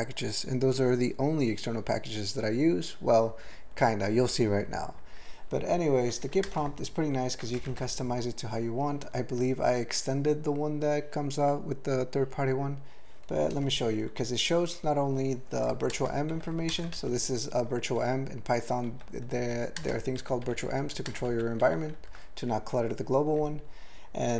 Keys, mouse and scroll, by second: 6.3 ctrl+p, 6.4 ctrl+space, 6.5 ctrl+e, 6.9 ctrl+g, 7.6 alt+shift+., 13.3 alt+BackSpace, 15.7 ctrl+p, 15.9 ctrl+space, 16.3 ctrl+g, 16.5 ctrl+a, 16.7 ctrl+space, 16.9 ctrl+alt+f, 18.9 ctrl+g, 19.3 ctrl+f, 19.8 ctrl+space, 20.2 ctrl+g, 20.4 ctrl+b, 20.6 ctrl+b, 20.8 ctrl+b, 21.1 ctrl+space, 21.3 ctrl+f, 21.6 ctrl+g, 21.9 ctrl+n.